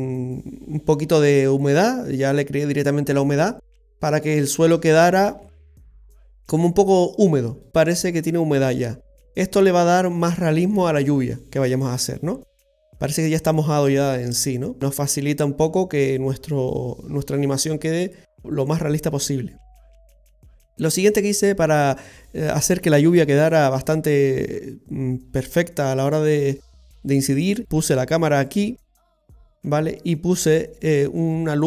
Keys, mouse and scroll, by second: 0.1 middle click, 0.5 middle click, 1.0 middle click, 5.9 middle click, 7.3-7.7 scroll down 1, 7.7 middle click, 18.0 scroll up 2, 18.2 middle click, 20.4-21.1 scroll down 4, 21.2 middle click, 23.4 shift+middle click, 27.6-28.4 scroll down 2, 27.6 KP_7, 28.4 right click.